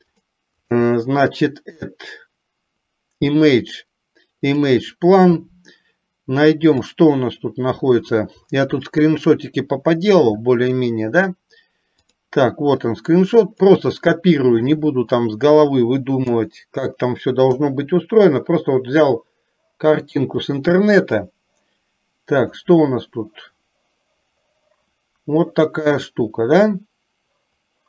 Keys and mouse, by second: 0.6-4.9 drag, 16.4 KP_7, 17.6 r, 20.8 KP_1, 23.4 click.